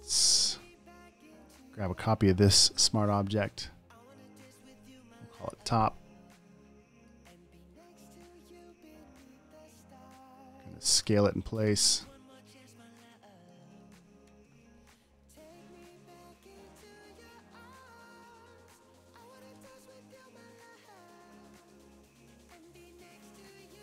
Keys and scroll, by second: 1.3 super+d, 1.4 v, 2.9 super+j, 5.2-6.0 typing, 9.1 v, 11.4 super+t, 14.5 Return, 15.5 alt+shift+m, 15.8 v, 16.1 space, 17.5 super+space, 18.3 space, 18.4 space, 18.7 super+t, 18.9 space, 19.5 space, 20.7 super+space.